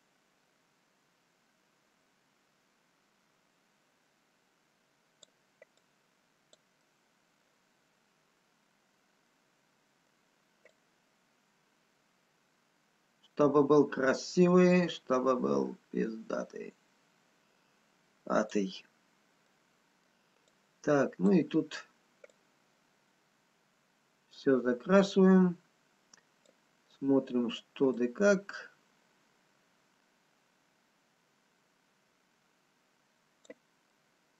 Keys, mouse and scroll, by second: 6.2 click, 6.9 middle click, 7.7 scroll down 2, 9.6 middle click, 9.6-10.0 scroll up 3, 10.7 click, 10.7 scroll down 1, 18.9 scroll down 3, 19.9 middle click, 21.2 click, 21.8-23.0 scroll up 1, 23.0 click, 27.0 middle click, 28.6 click, 34.0 middle click.